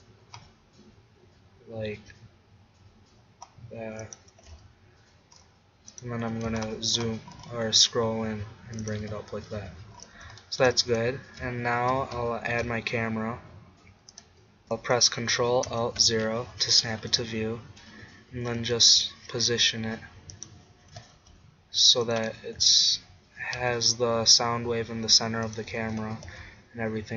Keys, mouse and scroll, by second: 4.3-6.0 drag, 4.4 g, 6.1-8.1 drag, 6.4 g, 9.0 click, 9.1 Tab, 9.7 z, 12.6 shift+a, 15.7 ctrl+alt+KP_0, 18.4 g, 20.9 g, 22.2-23.9 drag, 22.6 g, 25.6-27.1 drag, 26.0 g.